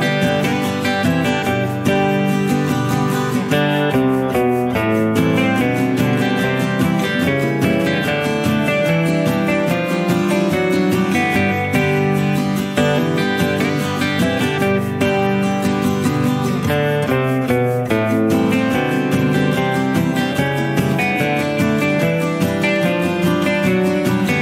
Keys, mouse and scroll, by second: 0.0 click, 1.0 -, 2.0 click, 2.5 -, 2.6-4.1 drag, 4.8 click, 7.7 click, 8.4-10.5 drag, 11.3-12.8 drag, 13.0 click, 13.2 middle click, 15.9 click, 20.4 click, 23.5 click.